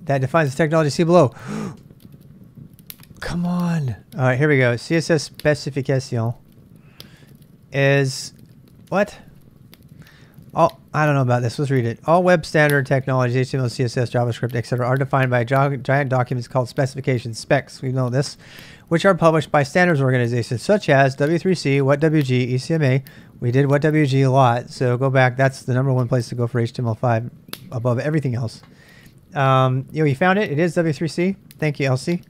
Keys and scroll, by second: 3.0 n, 4.0 j, 4.2 j, 5.0 k, 5.1 k, 6.4 ctrl+n, 6.5 ctrl+n, 6.9 ctrl+n.